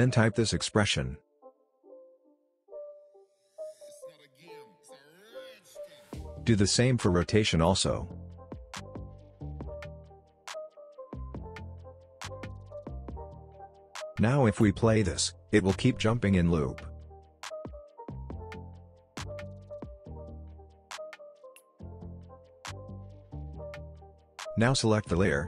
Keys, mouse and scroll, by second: 0.0-0.8 typing, 0.9 Down, 2.1 Return, 2.9 shift+', 3.5 Down, 3.9 Up, 4.2 Return, 5.4 click, 6.5 alt+click, 7.7-9.4 typing, 9.5 Down, 10.4 Return, 11.4 shift+', 11.8 Down, 12.3 Up, 12.6 Return, 13.5 click, 14.7 space, 18.8 space, 19.6-20.0 alt+scroll down 1, 20.8-23.6 drag.